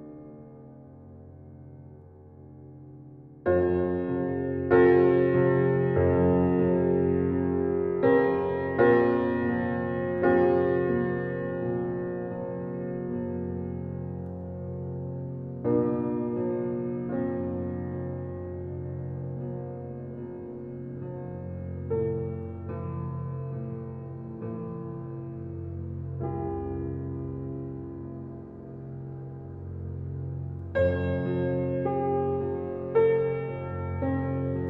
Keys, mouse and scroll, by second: 4.0 alt+click, 4.7 click, 5.3 alt+click, 6.4 ctrl+b, 10.2 alt+e, 13.1 alt+middle click, 13.4 alt+middle click, 14.0 shift+middle click, 14.2-14.6 scroll up 8, 14.6 shift+middle click, 15.4 alt+z, 15.7 click, 17.1 click, 18.0 click, 19.7 middle click, 20.1-20.5 scroll down 10, 21.1 alt+z, 21.4-21.7 scroll up 3, 21.7 shift+middle click, 22.3 alt+shift+click, 23.1-23.6 scroll down 13, 23.6 click, 24.0-25.7 drag, 26.3-28.2 drag, 28.2 Tab, 28.8 click, 29.8 click, 29.9-30.6 right drag, 30.6 click, 30.9-32.4 right drag, 32.4 click, 32.6-33.0 scroll down 3, 33.0 click, 33.5 click, 34.1 click.